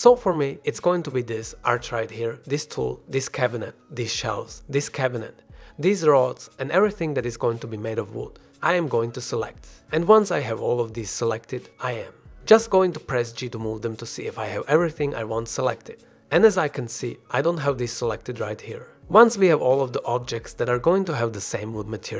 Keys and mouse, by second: 0.6 click, 2.2 shift+click, 3.9 shift+click, 8.8 shift+click, 10.3 shift+click, 11.8 shift+click, 13.2 shift+click, 13.9-14.5 drag, 14.6 g, 16.0 drag, 19.6 ctrl+z, 20.7 shift+click.